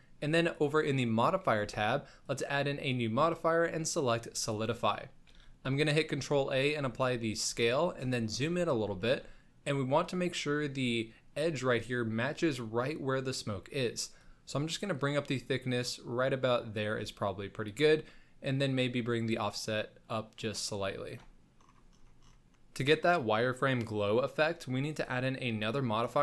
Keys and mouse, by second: 1.5 n, 2.4-4.6 drag, 5.3 ctrl+a, 7.2 shift+middle click, 8.3 shift+middle click, 9.0 shift+middle click, 14.2-16.8 shift+drag, 17.8-21.1 shift+drag, 24.8-26.2 drag.